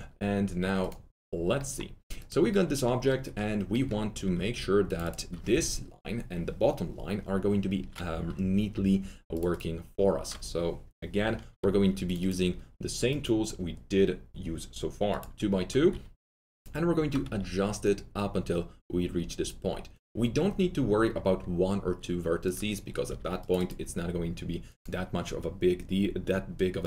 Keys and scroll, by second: 17.2 w, 23.0 w.